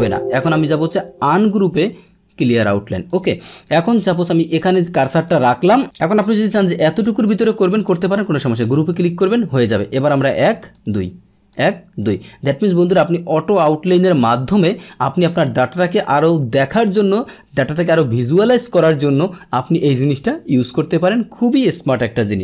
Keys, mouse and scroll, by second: 0.0 click, 1.4 click, 2.4 click, 3.1 click, 5.2-7.2 drag, 8.5 click, 10.1 click, 10.7 click, 11.5 click, 12.0 click, 13.8 click, 14.5 click, 15.3 click.